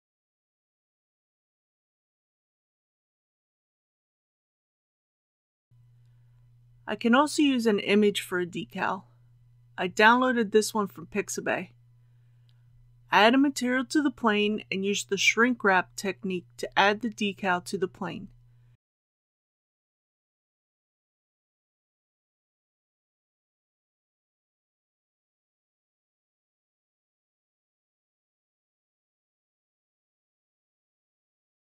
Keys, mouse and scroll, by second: 12.3 click, 21.1-22.1 scroll up 1, 22.1 s, 24.4 click, 26.1 scroll down 1, 30.9-31.7 drag.